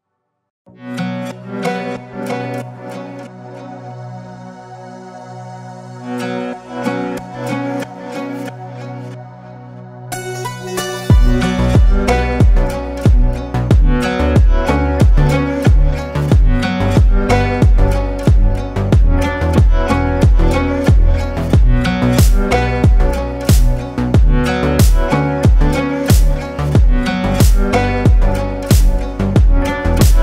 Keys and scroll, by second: 2.2 ctrl+space, 3.4 ctrl+space, 6.3 ctrl+space, 7.7 ctrl+space, 9.2 ctrl+space.